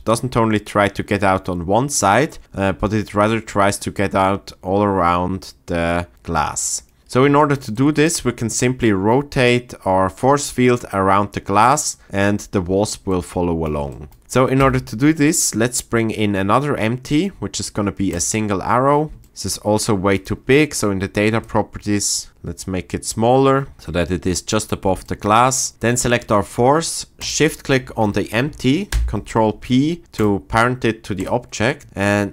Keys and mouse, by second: 14.6 shift+a, 20.1 click, 21.5 shift+click, 27.2 shift+click, 28.9 ctrl+p, 31.2 click.